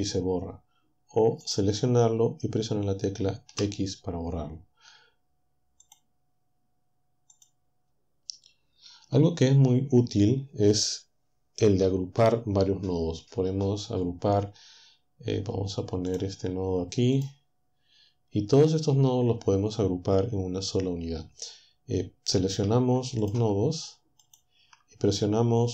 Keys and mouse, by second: 0.1 click, 2.2 x, 4.5 click, 6.0 click, 16.1 click, 17.2 click, 23.2 shift+click, 24.3 shift+click.